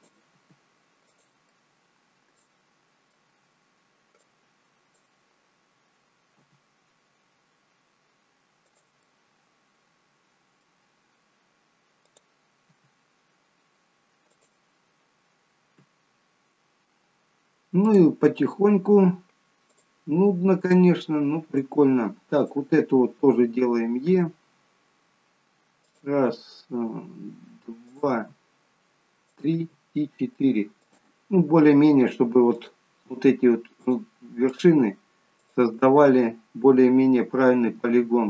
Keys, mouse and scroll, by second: 0.0 click, 0.4 g, 1.5 middle click, 4.2 click, 6.4 g, 9.2 middle click, 12.7 g, 17.9 click, 19.7 shift+click, 21.0 shift+click, 22.4 click, 24.1 e, 32.5 click, 34.0 shift+click, 37.7 f.